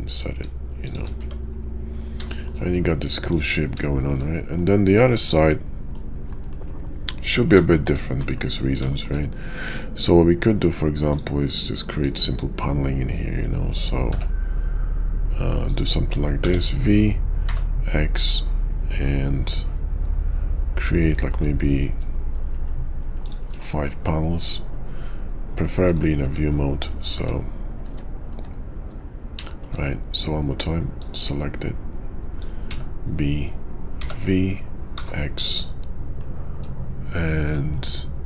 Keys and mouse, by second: 1.2 Tab, 2.3 shift+drag, 3.3 click, 3.9 shift+click, 4.5-5.9 middle drag, 6.3 KP_5, 7.0-7.5 middle drag, 7.7 shift+middle drag, 8.5 KP_5, 8.9 shift+click, 9.6 click, 11.1 click, 12.0-15.8 drag, 23.6 middle drag, 26.2 `, 27.1 `, 27.9 `, 28.3 `, 29.4 shift+drag, 31.0-38.2 drag.